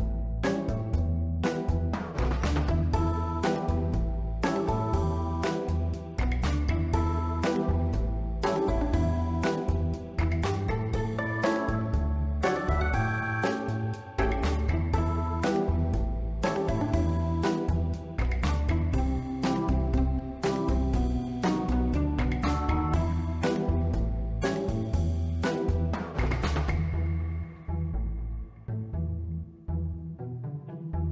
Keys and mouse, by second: 0.6 Tab, 2.2 b, 3.2 s, 3.4 z, 4.4 click, 4.8 ctrl+r, 5.8 click, 6.3 b, 7.2 click, 8.8 Tab, 9.1 middle click, 10.1 s, 10.3 x, 11.4 click, 12.7 shift+middle drag, 13.1 ctrl+middle drag, 13.6 middle click, 14.5-15.6 drag, 16.6 click, 17.0 Tab, 17.3 middle click, 18.1 shift+middle click, 19.3 s, 19.3 z, 20.0 click, 20.5-21.4 drag, 21.5 Tab, 21.8-22.1 middle drag, 23.0-24.1 right drag, 24.5 middle click, 25.1 click, 26.1 middle drag, 26.5 ctrl+middle drag, 26.9-28.2 middle drag, 28.3 ctrl+middle click, 29.3 shift+d, 29.4 shift+Return, 30.2-30.8 drag.